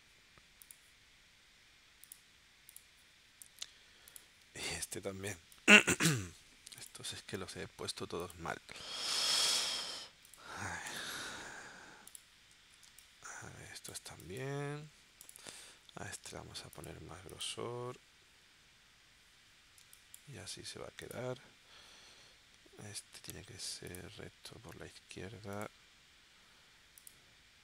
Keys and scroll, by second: 4.5 space, 12.8 space, 19.8 space.